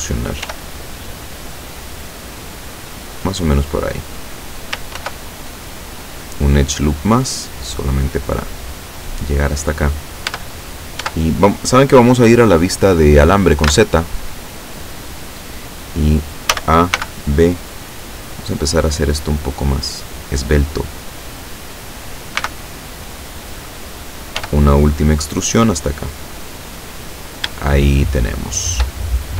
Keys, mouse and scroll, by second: 0.5 e, 3.8 click, 5.0 ctrl+r, 6.1 click, 9.0 click, 10.3 Tab, 11.1 Tab, 13.7 z, 16.5 a, 17.0 b, 17.3 click, 18.9-21.4 drag, 22.4 b, 23.0 click, 24.4 e, 26.2 click, 26.7-27.4 scroll down 1, 27.7-29.0 shift+middle drag, 29.1 shift+scroll up 2.